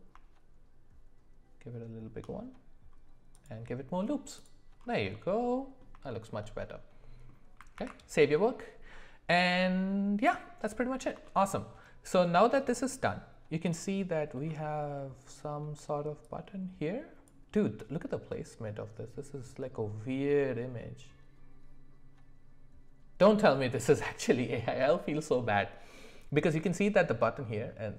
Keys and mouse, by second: 5.1-5.8 middle drag, 6.1 shift+middle click, 6.5 middle click, 11.2 shift+middle click.